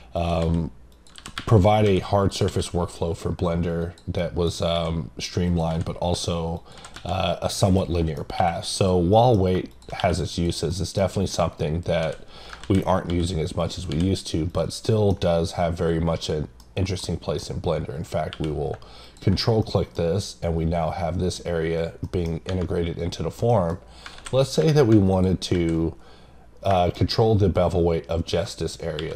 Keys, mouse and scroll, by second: 0.1 click, 0.9 click, 4.2 middle click, 5.5 click, 6.5 click, 6.7 click, 7.7 click, 7.9 middle click, 8.7 click, 9.7 click, 10.3 click, 10.7 middle click, 11.0-12.0 scroll up 2, 13.6 click, 14.5 click, 14.9 middle click, 16.2 middle click, 19.0 click, 19.6 middle click, 20.1-21.3 scroll up 1, 22.0 middle click, 23.5 middle click, 25.1 click, 25.8-26.5 scroll up 1, 26.5 scroll down 1, 26.8 middle click.